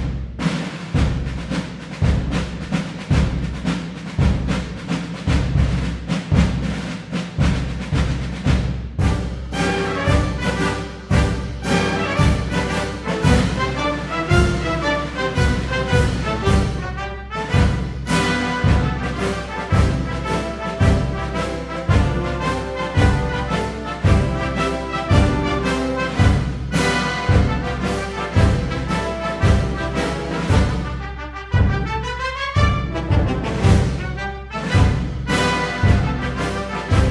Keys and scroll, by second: 36.7 d.